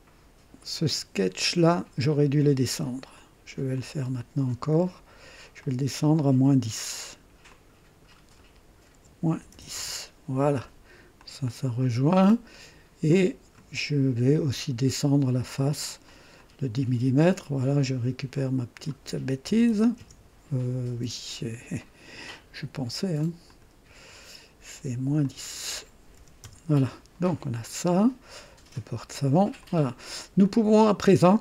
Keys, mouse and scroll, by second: 3.1 click, 3.7 click, 5.6 click, 7.4 click, 8.9 KP_Subtract, 8.9 KP_Subtract, 9.3 KP_1, 9.5 KP_0, 9.7 Return, 11.2 click, 13.1 click, 16.0 click, 18.3 click, 19.5 KP_1, 19.7 KP_0, 19.9 KP_Enter, 21.7 click, 23.1 click, 25.2 click, 26.1 -, 26.4 Return, 27.6-29.6 drag, 29.8 click, 30.4 click.